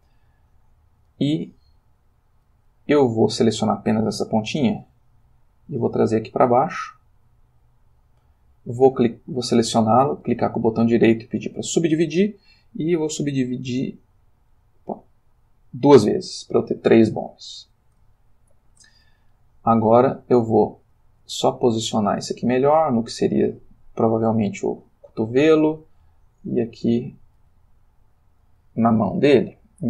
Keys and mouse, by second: 1.0 click, 1.8 click, 4.7 g, 7.6 click, 8.8 click, 10.2 right click, 11.3 click, 13.1 click, 13.9 click, 15.0 click, 17.3 click, 18.1 ctrl+middle click, 19.3 g, 20.4 click, 20.8 click, 21.1 g, 23.3 click, 25.2 click, 25.6 g, 26.8 click, 27.3 click, 27.4 g, 28.3 click, 29.3 click.